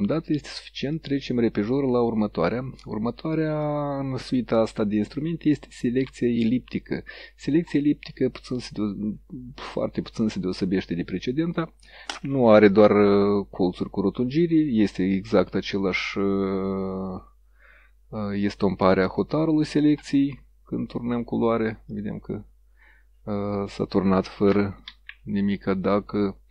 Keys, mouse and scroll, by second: 1.0 click, 3.7-6.9 drag, 7.8 click, 16.1-17.1 drag, 19.1 click, 21.1 click, 22.0 click, 24.9 ctrl+z.